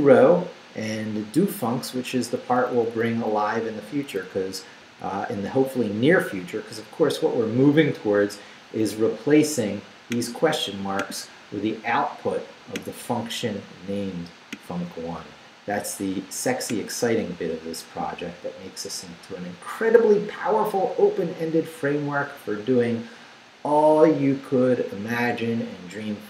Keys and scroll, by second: 0.3 Down, 2.2 Down.